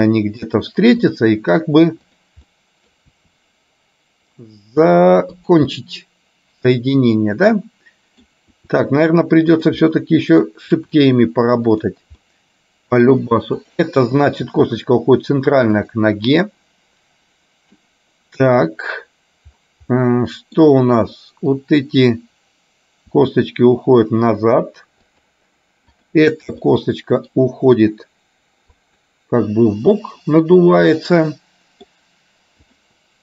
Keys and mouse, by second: 2.7 middle click, 3.2 r, 5.8-8.3 middle drag, 8.7 r, 10.0 middle click, 10.7 r, 12.3 middle click, 14.6 r, 16.5-18.0 middle drag, 20.1 middle click, 21.7 click, 23.3 r, 26.0 click, 26.8 middle click, 27.8 r, 30.1 middle click, 31.0-32.0 middle drag, 32.8 click.